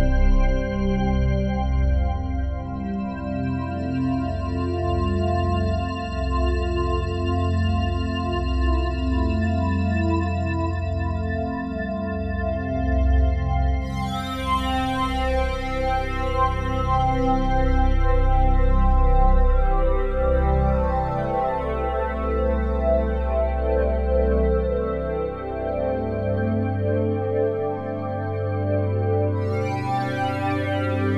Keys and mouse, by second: 1.5 alt+click, 2.1 alt+shift+click, 2.6 ctrl+alt+click, 5.7 click, 6.8 click, 8.0 click, 8.9 KP_1, 8.9 KP_0, 9.2 Return, 12.4 click, 13.2 click, 15.0 click, 15.6 alt+click, 17.2 click, 17.8 alt+click, 19.0 alt+click, 19.9 7, 20.6 ctrl+alt+click, 21.5 typing, 22.8 click, 24.0 click, 24.3 click, 25.0 click, 25.6 click, 25.9 alt+click, 26.8 click, 29.2 click, 30.0 click, 30.6 click.